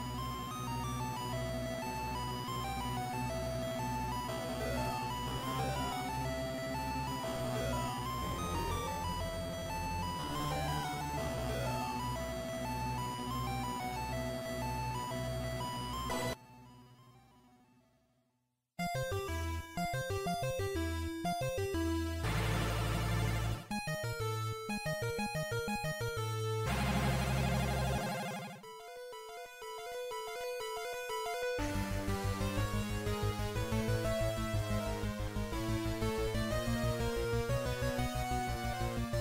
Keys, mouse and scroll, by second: 1.2 click, 2.4 click, 4.5 middle click, 7.2 e, 10.9 click, 10.9 KP_3, 12.1-12.9 scroll down 3, 14.2 scroll down 2, 14.2 shift+middle click, 17.0-17.6 scroll up 1, 17.6-18.2 scroll up 1, 20.5 click, 20.5-20.8 scroll up 3, 25.6 click, 33.0 click, 38.4 click.